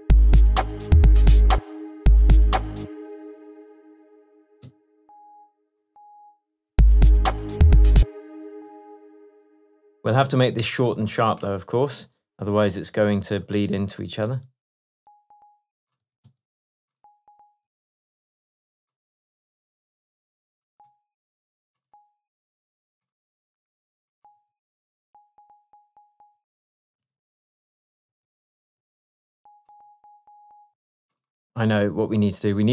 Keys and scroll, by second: 1.6 space, 4.7 p, 6.8 space, 8.0 space, 10.3 shift+Tab, 16.1 space, 17.7 space, 24.4 space, 26.4 space, 27.0 shift+space, 27.2 shift+Tab, 27.8 shift+space, 30.7 space.